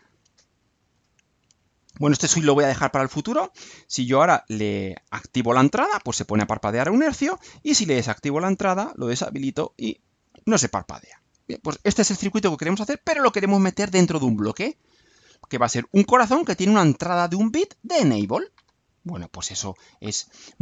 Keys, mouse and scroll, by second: 19.6 click.